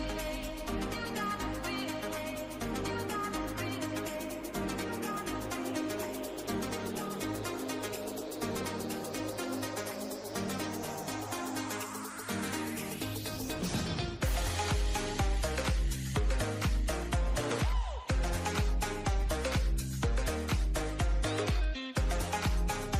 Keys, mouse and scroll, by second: 3.6-4.7 shift+middle drag, 4.7 Tab, 5.2 click, 7.6 click, 8.2-10.3 drag, 10.3 right click, 11.2 Tab, 11.9-13.5 drag, 13.6-14.7 drag, 14.9-16.0 drag, 16.0-17.4 drag, 18.2-20.2 drag, 20.5 click, 21.6 Tab, 22.6-22.9 middle drag.